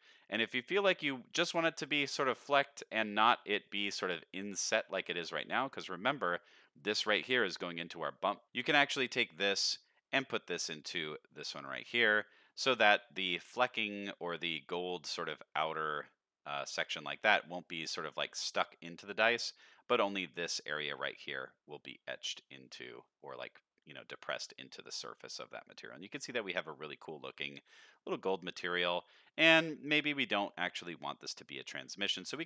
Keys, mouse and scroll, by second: 0.2 middle click, 0.8 scroll up 1, 3.4 middle click, 5.3 middle click, 6.2 middle click, 6.9 click, 8.4 middle click, 8.4-9.3 scroll down 1, 9.3-11.5 drag, 12.3 middle click, 12.7 scroll down 1, 13.1 middle click, 14.1 middle click, 14.9 middle drag, 16.8-17.4 middle drag, 19.2 middle drag, 22.3 middle drag, 22.7-23.0 scroll down 2, 23.0 middle click, 24.5 middle click, 25.4 middle drag, 25.8 middle click, 26.6 middle drag, 27.7 middle drag, 28.9 middle click, 29.3 middle click, 31.2 click, 32.2 middle click.